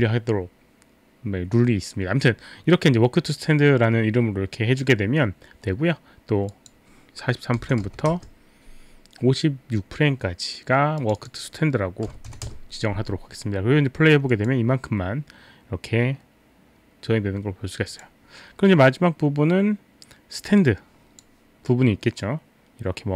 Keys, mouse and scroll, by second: 6.5 click, 7.6 KP_4, 7.9 KP_3, 7.9 KP_4, 8.1 Return, 8.4 Return, 8.4 KP_3, 10.9 click, 12.0 KP_5, 12.3 KP_6, 12.5 Return, 13.0 Return, 13.0 KP_6, 14.4 click, 18.0 click, 20.6 click, 22.2 click.